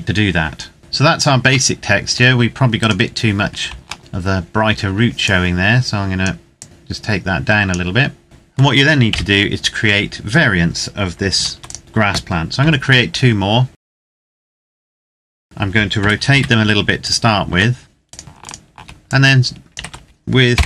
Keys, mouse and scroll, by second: 0.8-1.5 scroll down 1, 1.5 middle click, 2.5 right click, 3.8 shift+middle click, 4.0-4.9 scroll up 1, 4.9 click, 6.6 click, 8.2 middle click, 8.8 KP_7, 11.0 ctrl+s, 11.4 click, 12.4 shift+d, 13.5 click, 13.7 shift+d, 14.0 click, 14.2 middle click, 14.7 right click, 14.8 Tab, 15.7 r, 16.1 z, 16.7 click, 17.2 Tab, 17.7 right click, 18.2 shift+right click, 18.8 click, 19.5 ctrl+z, 20.3 o.